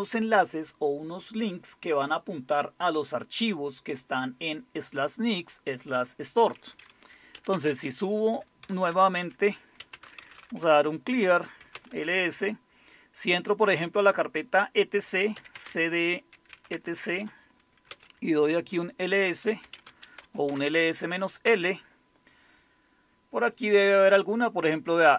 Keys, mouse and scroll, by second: 7.3-12.2 typing, 15.3-21.4 typing.